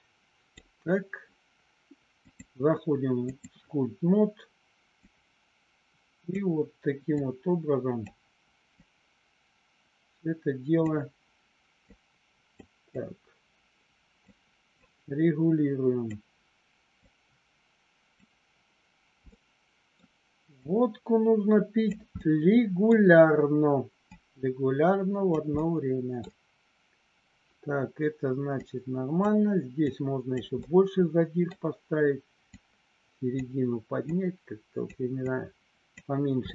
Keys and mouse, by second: 2.5 click, 5.1-6.3 drag, 7.2 click, 8.7-10.8 drag, 11.8 click, 12.9-14.2 drag, 14.7-16.2 drag, 16.9-18.1 drag, 19.2 middle click, 20.7-21.9 drag, 22.2 middle click, 23.9-25.3 drag, 25.6 middle click, 28.6 click, 29.8 click, 30.6 middle click, 32.4 click, 34.1 click, 35.2 click, 36.4 middle click.